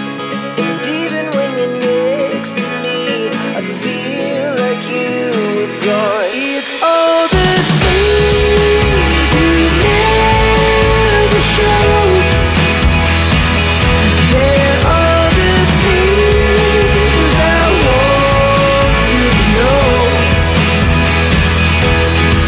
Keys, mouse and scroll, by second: 0.1-0.5 scroll down 1, 0.7 click, 1.9 click, 2.7 click, 2.8 double click, 3.2 click, 4.3 click, 5.2 alt+Delete, 5.7 click, 5.8 double click, 6.5 click, 7.4 click, 7.9 click, 8.8 click, 10.1 click, 10.7 click, 11.3 click, 11.8 1, 13.2 Tab, 13.6 click, 14.3 click, 15.7 scroll up 1, 17.2 click, 17.9 5, 18.5 Tab, 19.3 click, 20.2 click, 20.9 1, 21.3 Tab, 22.2 click.